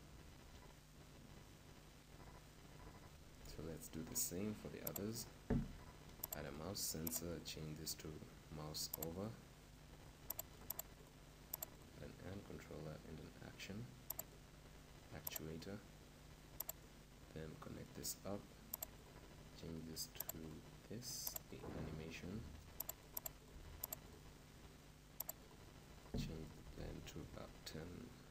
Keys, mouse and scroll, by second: 2.4-3.5 middle drag, 3.5-7.1 right drag, 7.1-9.0 drag, 23.7-28.3 drag.